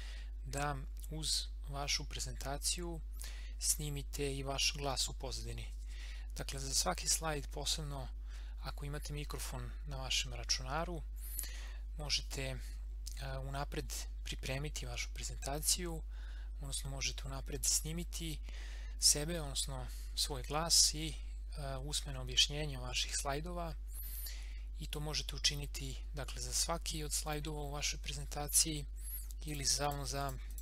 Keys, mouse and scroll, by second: 29.5 click.